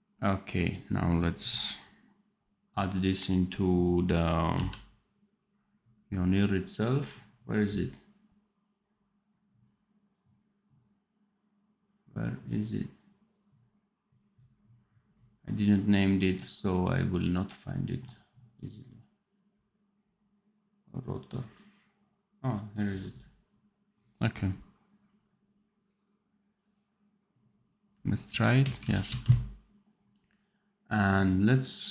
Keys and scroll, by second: 4.4 p, 27.8 v, 28.7 ctrl+z, 29.0 ctrl+s.